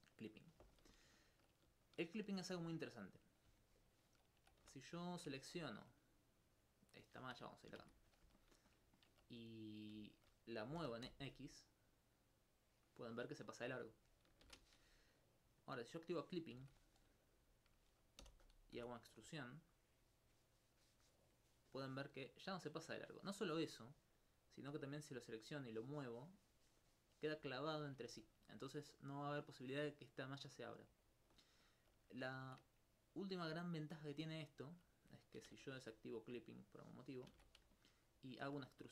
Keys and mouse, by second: 0.2 click, 3.2 click, 6.2 right click, 7.8 shift+space, 9.5 shift+right click, 10.1 alt+click, 13.8 right click, 14.5 shift+space, 15.6 click, 16.6 shift+space, 18.2 e, 18.8 x, 23.7 click, 24.4-25.7 right drag, 27.5 alt+click, 28.5 alt+click, 28.9 right click, 31.0 alt+click, 31.6 alt+click, 32.4 ctrl+Tab, 33.0 click, 33.7 right click, 34.2 alt+click, 35.5 ctrl+shift+space, 36.5 click, 37.4 shift+space, 37.8 alt+click.